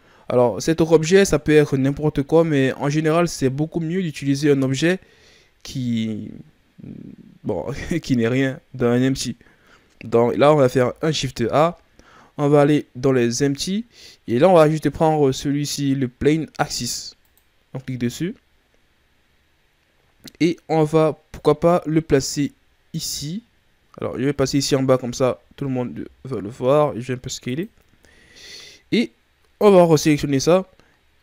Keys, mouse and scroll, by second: 1.0-2.2 shift+scroll up 4, 2.2 ctrl+scroll down 2, 2.8-3.3 shift+scroll down 2, 3.3-3.8 ctrl+scroll up 1, 3.8 shift+scroll up 3, 10.5 shift+a, 18.1-21.1 scroll down 1, 21.2 click, 24.8-25.2 shift+scroll down 1, 25.2-25.8 scroll up 2, 25.8 s, 27.9-29.7 shift+scroll up 3, 29.7 right click.